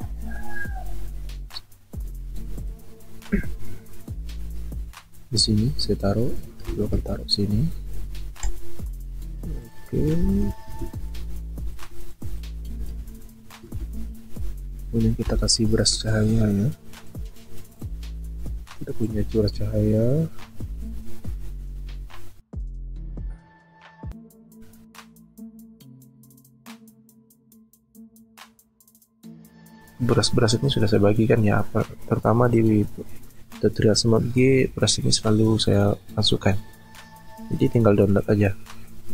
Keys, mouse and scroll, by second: 6.7 ctrl+alt+z, 10.2 ctrl+t, 11.1 alt+shift+click.